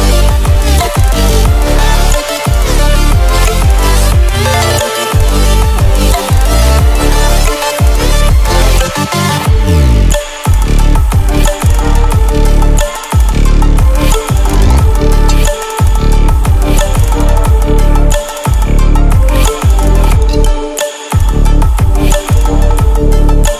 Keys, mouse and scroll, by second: 18.1 ctrl+w, 20.2 ctrl+w, 21.3 click, 23.3 ctrl+w.